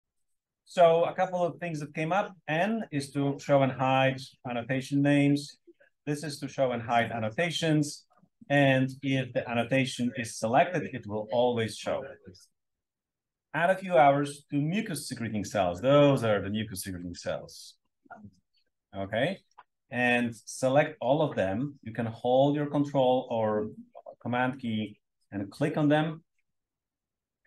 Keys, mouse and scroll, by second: 0.0 Return, 2.0 click, 2.6 click, 3.0 click, 3.5 click, 3.8 click, 4.2 click, 4.6 click, 5.0 click, 5.7 click, 6.2 click, 6.5 click, 6.9 click, 7.3 click, 7.6 click, 8.0 click, 8.4 click, 11.3 click, 12.0 click.